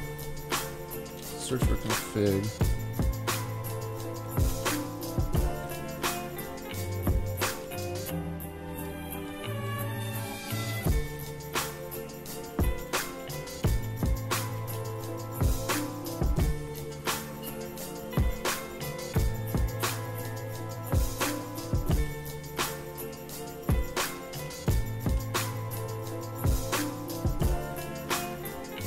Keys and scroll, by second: 1.2 super+f, 1.3-2.4 typing, 4.5 super+g, 5.5 super+g, 7.5 super+g.